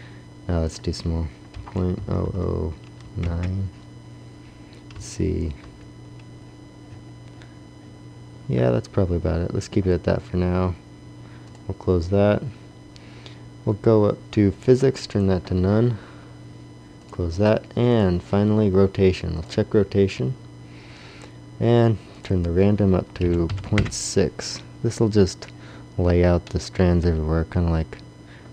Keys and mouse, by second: 2.3 KP_0, 3.1-5.0 middle drag, 5.0 KP_1, 5.7 KP_5, 13.0 drag, 13.3-15.4 middle drag, 15.5-16.9 drag, 17.1-24.3 drag, 25.1-26.6 drag.